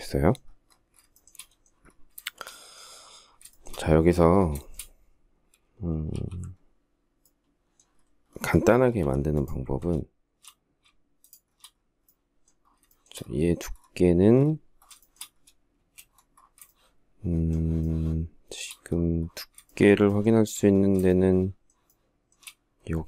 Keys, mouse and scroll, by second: 0.4 shift+middle click, 1.5 shift+middle click, 2.7 shift+middle click, 3.8 shift+middle click, 5.3 alt+t, 8.2 m, 10.4 shift+click, 10.7 shift+scroll up 1, 12.1 shift+middle click, 14.2 shift+middle click, 15.0 space, 15.9 shift+middle click, 17.1 shift+middle click, 18.9 shift+middle click, 19.1 shift+middle click, 19.4 shift+double middle click, 20.3 shift+double middle click, 20.5 shift+scroll, 21.1 shift+middle click.